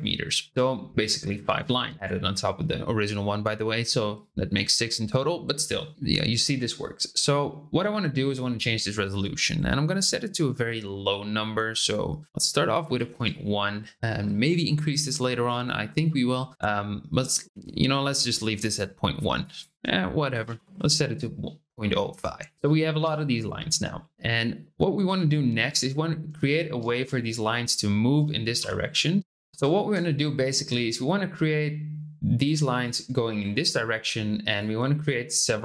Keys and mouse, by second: 9.4-13.6 drag, 19.5-21.8 drag, 26.4-26.7 shift+middle drag, 28.5 d, 30.0 shift+middle click, 31.0-32.4 drag, 32.8 click, 34.5 click, 35.2 click.